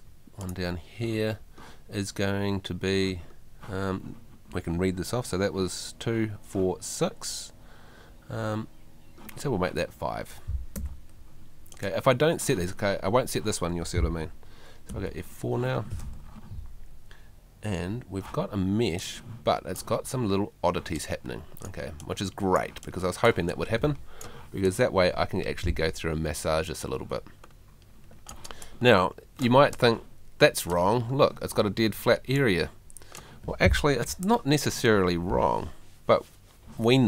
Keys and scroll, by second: 10.8 5, 14.9 F4, 34.1 F2.